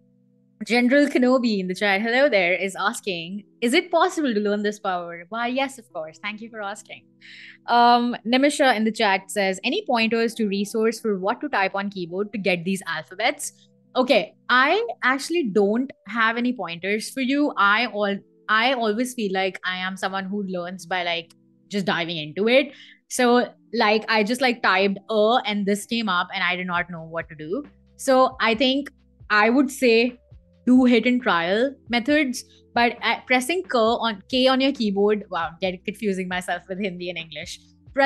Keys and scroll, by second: 23.8 a, 25.6 Escape, 28.0 Escape, 29.4 BackSpace, 29.8 t, 32.5 k, 33.3 Escape.